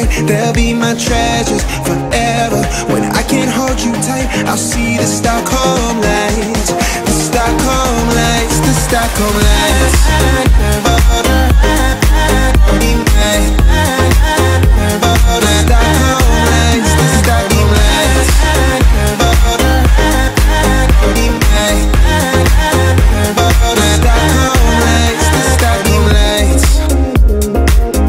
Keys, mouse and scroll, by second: 1.1 space, 1.3 scroll down 1, 2.1 middle click, 2.8-3.8 scroll up 1, 3.8 click, 4.6-6.0 scroll down 1, 6.4 click, 8.1 right click, 8.9 click, 10.1 shift+x, 10.7 l, 11.5 click, 12.6 click, 12.6 space, 12.9 e, 13.1 click, 13.8 space, 13.9 click, 15.1 Delete, 15.9-16.7 scroll up 1, 16.7 f, 17.3 click, 18.2-19.3 typing, 19.0 Return, 20.2 scroll down 1, 20.5 shift+middle click, 21.1-21.4 scroll up 1, 22.3 click, 23.2 m, 23.3 click, 24.6 Up, 25.9-26.8 typing, 26.7 Return, 27.5 scroll down 1.